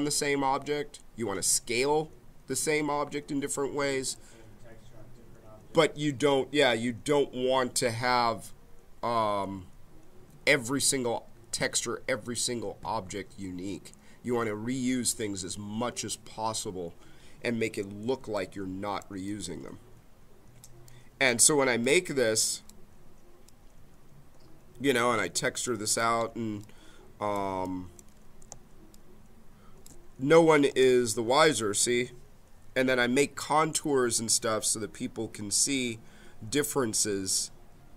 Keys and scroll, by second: 28.4 space.